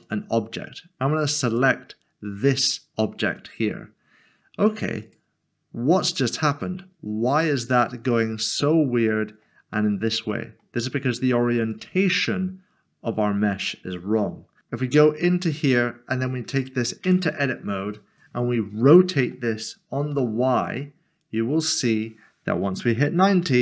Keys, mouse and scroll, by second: 0.0 click, 7.4 click, 7.6 middle click, 11.7 click, 14.6 click, 15.5 click, 17.0 Tab, 18.9 typing, 20.1 typing, 23.2 typing.